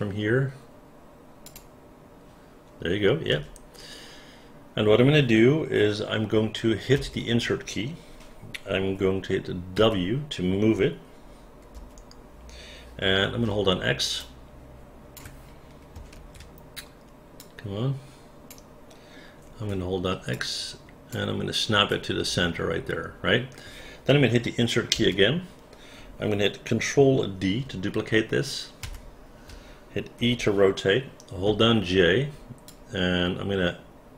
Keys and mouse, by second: 1.4 click, 3.3 space, 6.9 Insert, 9.7 w, 11.7 Insert, 13.5 x, 14.2 click, 16.1 ctrl+z, 17.4-18.5 drag, 19.7 x, 20.3 click, 24.9 Insert, 28.8 ctrl+d, 30.2 e, 32.3 j, 32.6-34.1 drag.